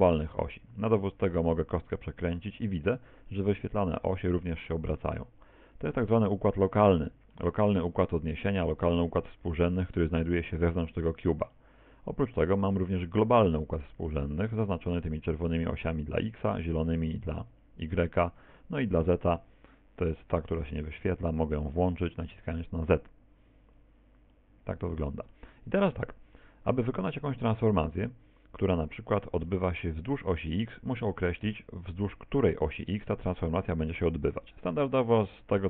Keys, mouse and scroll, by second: 0.1-1.0 scroll up 5, 1.0 r, 6.2 middle click, 10.1 middle click, 18.5 z, 19.1 z, 22.6 click, 26.4 middle click, 28.5 click, 29.2-29.5 scroll down 1, 29.5 middle click, 31.9 middle click.